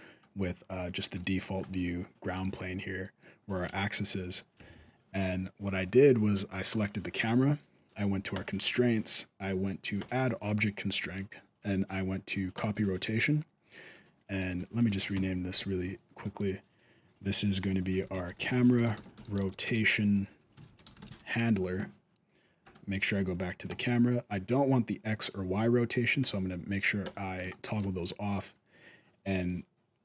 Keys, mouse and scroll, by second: 0.0 middle click, 0.0-0.3 scroll down 1, 1.0-1.6 shift+scroll up 2, 1.1 shift+middle click, 2.8 middle click, 3.5 shift+scroll up 1, 3.7 shift+middle click, 6.4 right click, 8.1 click, 9.8 click, 14.3 right click, 14.9 F2, 18.9 t, 22.4 right click, 23.0 shift+middle click, 23.2 scroll down 2, 23.5 shift+middle click, 26.0 click, 26.8 click, 27.3 shift+middle click, 28.3-29.8 scroll up 1.